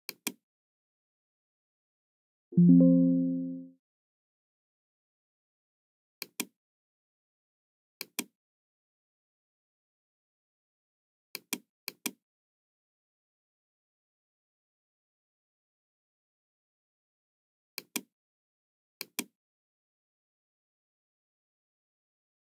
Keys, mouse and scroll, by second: 0.0 click, 2.5 click, 6.1 click, 8.0 click, 8.8-9.8 middle drag, 11.3 click, 11.8 click, 17.7 click, 19.0 click, 20.3-20.7 scroll down 2, 21.2-21.5 scroll down 2.